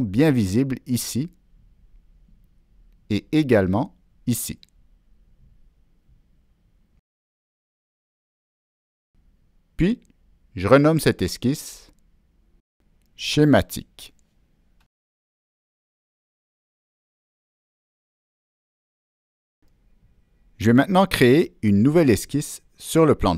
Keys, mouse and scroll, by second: 0.8 click, 2.9 click, 3.6 click, 5.3 click, 6.1 click, 6.8 click, 9.6 click, 12.3 click, 16.9 Return, 18.1 click, 18.3 Return, 23.1 click.